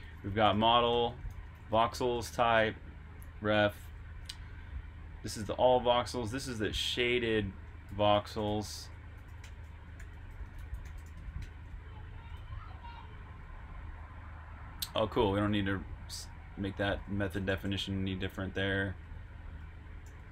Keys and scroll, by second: 5.5-11.1 typing, 13.8 typing, 15.1-17.5 typing, 19.5 Return, 19.8-20.3 typing.